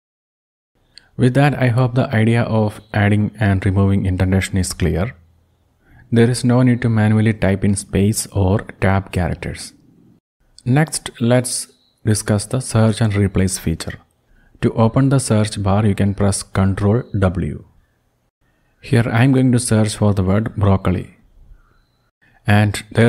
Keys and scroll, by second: 2.4 Right, 4.0 Up, 4.4 Up, 13.7 ctrl+w, 18.5-20.8 typing, 22.3 Return.